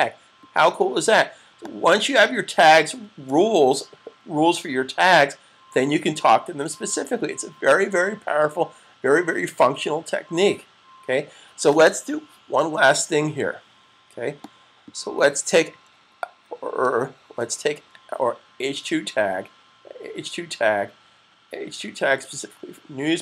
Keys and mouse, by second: 1.5 click, 4.3 super+s, 14.1 click, 22.9 click.